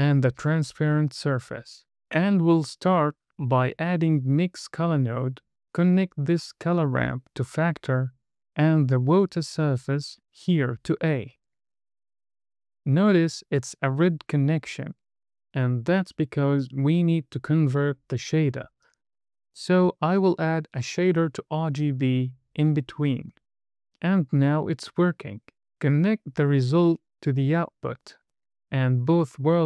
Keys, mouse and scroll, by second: 0.0 middle click, 0.5 scroll down 1, 0.7 middle click, 1.9 shift+a, 4.8 click, 5.9 click, 8.4 middle click, 8.9-9.2 scroll up 2, 9.1 middle click, 10.5 middle click, 11.3 drag, 12.6 click, 14.3-14.9 scroll down 1, 16.6 scroll up 1, 17.0 middle click, 17.7 shift+a, 21.7 drag, 23.1 click, 23.6 drag, 25.0 click, 26.1 drag, 28.5 drag.